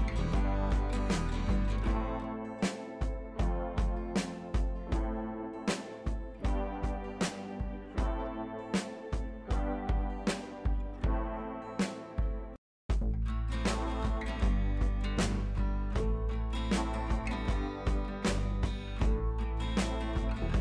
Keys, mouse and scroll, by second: 1.0 space, 1.1-3.1 drag, 2.6 click, 4.4 space, 4.4 click, 5.0 space, 5.3-5.9 scroll down 1, 6.3 ctrl+d, 6.6 right click, 7.4 click, 7.7-8.3 scroll down 1, 8.3-11.3 drag, 11.6 ctrl+t, 12.1-12.6 drag.